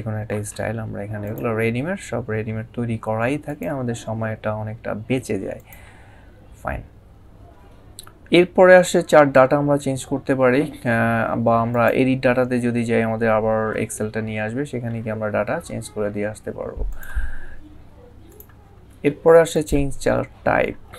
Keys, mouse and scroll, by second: 1.1 click, 3.3 click, 5.4 click, 11.5 click, 16.7 click.